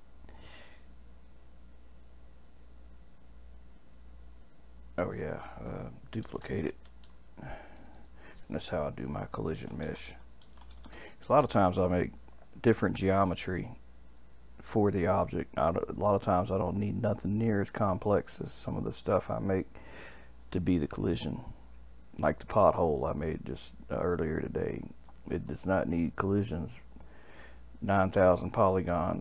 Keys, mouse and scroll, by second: 6.2 shift+d, 7.7 click, 7.9-11.1 drag, 20.1-20.5 scroll down 1, 20.5-26.3 middle drag.